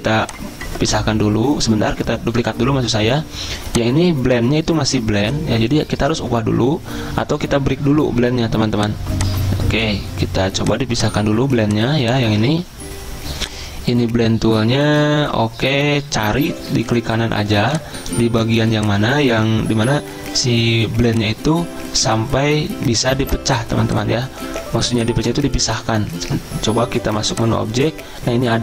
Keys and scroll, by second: 12.5 ctrl+z.